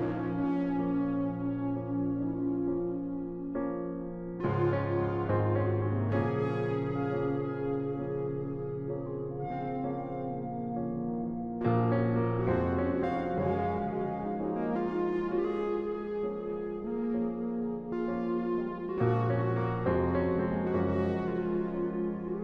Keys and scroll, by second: 3.0-4.4 typing, 13.8 space, 15.2 ctrl+z, 16.6 space.